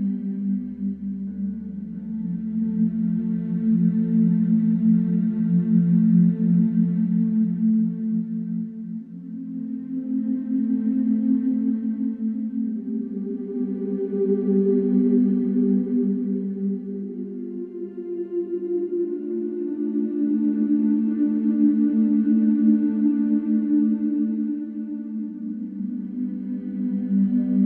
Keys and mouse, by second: 0.8 click, 3.0 middle click, 3.5 shift+a, 8.3-10.9 drag, 8.6 h, 10.6 h, 13.5 alt+z, 14.8 ctrl+p, 16.2 r, 16.5 Escape, 16.7 r, 17.4 z, 17.5 Escape, 21.5 shift+a, 23.9 ctrl+alt+KP_0.